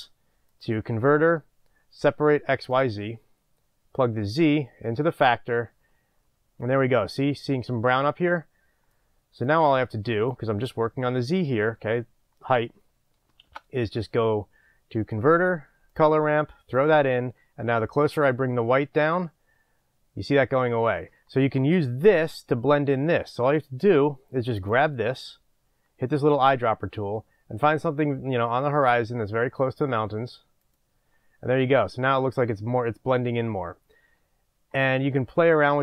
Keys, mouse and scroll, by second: 4.4 drag, 16.0 shift+a, 16.8 click, 18.1-30.6 drag, 35.2-35.8 drag.